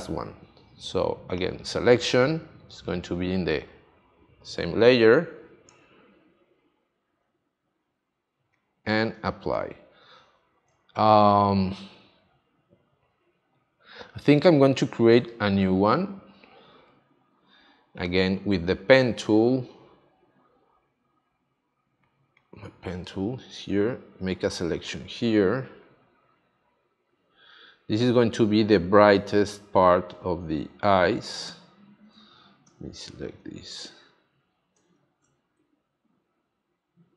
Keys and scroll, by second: 7.0 shift+F5, 9.5 space, 32.7 super+d, 34.7 super+d.